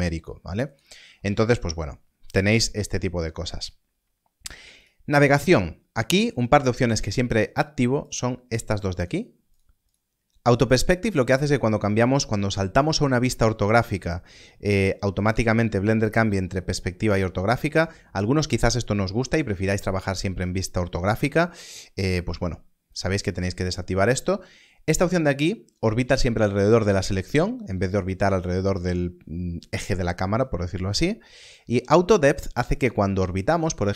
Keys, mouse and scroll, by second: 0.7 click, 4.7 click, 8.0 click, 22.8 click, 31.4 click.